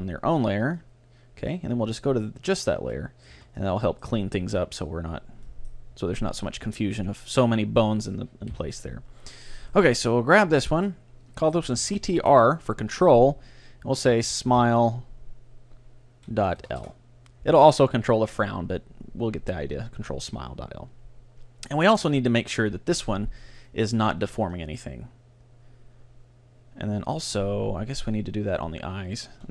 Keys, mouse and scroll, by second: 2.3-4.1 drag, 3.0-5.4 middle drag, 3.4 a, 5.5-10.8 middle drag, 7.5-7.9 scroll down 1, 8.5 KP_3, 9.7-11.5 right drag, 10.9-12.8 drag, 23.7-26.5 drag, 28.1-29.5 drag.